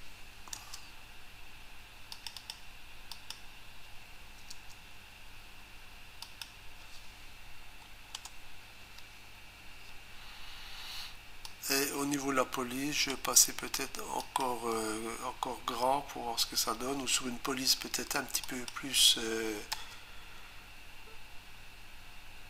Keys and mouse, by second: 2.1 click, 2.4 click, 3.1 click, 4.5 Return, 6.2 click, 8.1 space, 8.4 Delete, 11.5 click, 14.2 click, 18.4 click, 19.7 Return.